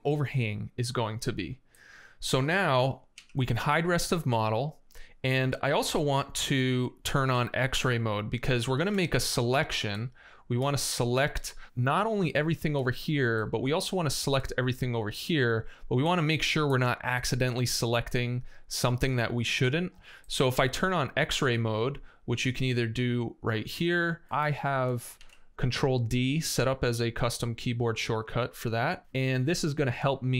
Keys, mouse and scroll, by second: 3.0 x, 8.6 space, 12.3 click, 25.0 shift+d, 28.8 space, 29.9 space.